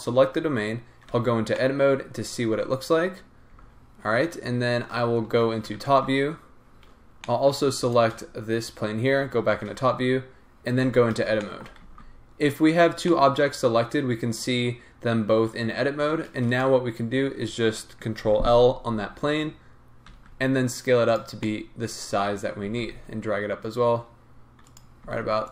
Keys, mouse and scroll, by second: 1.1 Tab, 1.4 scroll down 2, 1.5-7.9 middle drag, 3.1-3.5 scroll up 2, 3.5 Tab, 5.7 KP_7, 7.9 shift+click, 9.2 KP_7, 10.8 Tab, 11.4-16.6 shift+middle drag, 12.0 z, 12.7 scroll up 1, 13.7-14.4 scroll down 1, 16.6 click, 18.2 ctrl+l, 20.1 s, 21.4-22.6 middle drag, 22.6 g, 25.0 s.